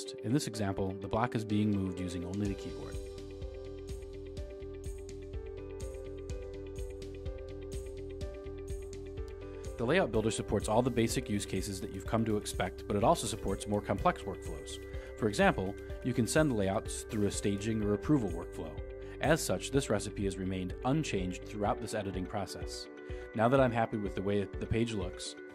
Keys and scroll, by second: 0.2 Return, 0.5 Down, 1.0 Down, 1.5 Down, 2.1 Return.